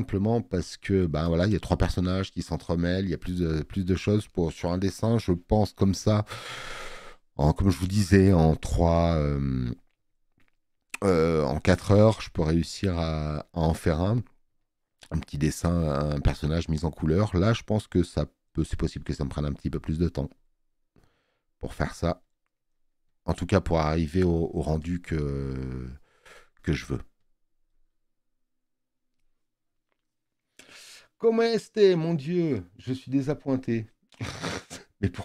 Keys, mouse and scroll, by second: 6.9 space, 7.1 click, 14.3 space, 14.7 click.